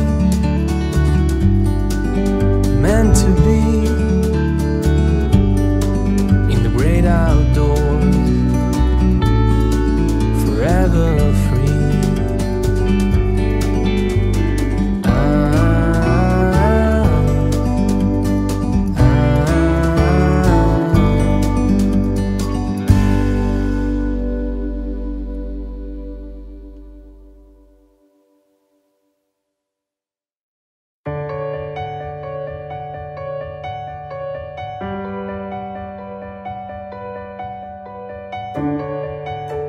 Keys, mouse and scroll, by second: 0.3 KP_3, 0.8-1.1 scroll down 2, 1.2 scroll up 3, 1.6 click, 2.4-2.8 scroll up 2, 3.8-5.4 middle drag, 5.4 KP_1, 5.9 scroll up 1, 6.1-6.5 middle drag, 6.5-6.9 scroll down 3, 6.9 scroll up 1, 7.1 middle click, 7.4-7.8 scroll down 1, 8.3 click, 10.1 click, 10.9 shift+a, 13.2-15.2 drag, 15.2-17.2 drag, 19.0-20.5 drag, 21.0 click, 21.3 click, 23.0 ctrl+s, 24.7 ctrl+a, 25.8 scroll up 2, 26.0-26.3 middle drag, 26.3-26.8 scroll down 5, 26.8-28.5 scroll up 3, 28.5 scroll up 3, 28.7-29.4 middle drag, 29.4 scroll down 2, 29.6-30.4 middle drag, 30.4 f, 31.6 g, 33.4 g, 35.4 scroll down 2, 36.0 KP_3, 38.1 click, 38.3 click, 38.6-39.0 scroll up 3, 39.1-39.5 shift+middle drag, 39.5-39.6 scroll down 1.